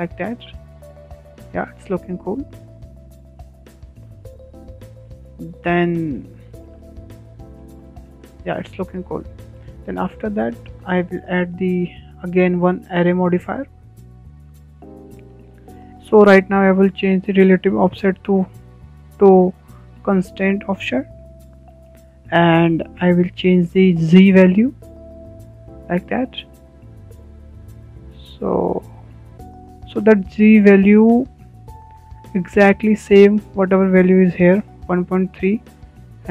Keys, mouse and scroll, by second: 1.7-2.0 scroll down 4, 2.0-5.1 middle drag, 4.9 Tab, 5.1 Tab, 5.2 scroll down 5, 5.6-6.1 middle drag, 6.1 click, 6.4-6.8 scroll up 4, 6.8-8.2 shift+middle drag, 8.2 scroll up 1, 8.4-12.9 shift+middle drag, 12.9 click, 14.0-15.9 drag, 19.1 click, 21.7 click, 23.1-25.3 shift+middle drag, 25.3-28.3 drag, 34.2 click, 36.2 click.